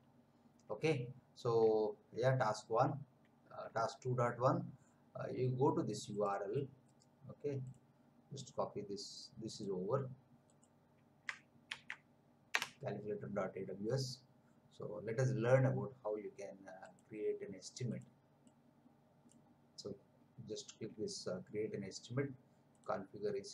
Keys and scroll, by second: 11.7 ctrl+v, 12.6 Return.